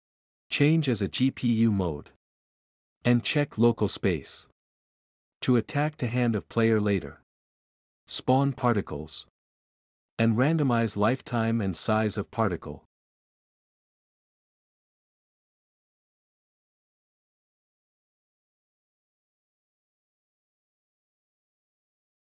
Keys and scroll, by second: 10.2 typing, 19.0-22.2 typing.